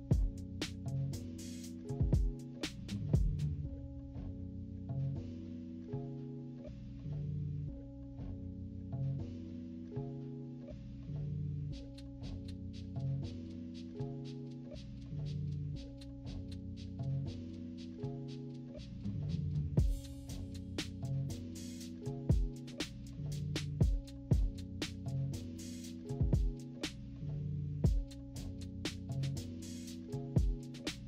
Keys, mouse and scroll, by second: 1.2 -, 1.7 =, 1.9 scroll up 1, 1.9 scroll down 1, 2.0 =, 2.3 scroll up 2, 2.6 click, 2.7 click, 3.0 click, 3.2 click, 4.7 click, 5.3-10.8 drag, 11.0 -, 11.2 scroll down 4, 11.2 =, 11.6 click, 12.3 -, 12.8 =, 12.9 scroll up 2, 13.1 scroll down 2, 13.1 =, 13.5 scroll up 2, 13.9 click, 14.7-18.7 drag, 18.9-22.3 drag, 22.8 -, 23.0 -, 23.2 scroll down 2, 23.4 =, 23.6 scroll up 2, 24.0 click, 24.0 right click, 25.0 scroll up 1, 25.3 click, 26.0 scroll up 1, 26.3-28.2 typing, 26.8-27.3 scroll up 4, 27.9 scroll up 2, 28.6 click, 29.8 click, 30.4 click, 30.7 -.